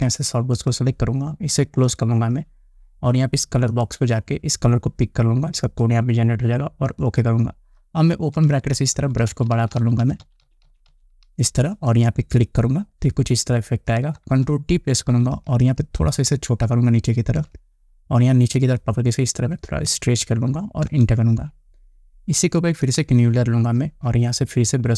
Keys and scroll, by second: 15.5 ctrl+t, 21.4 Return.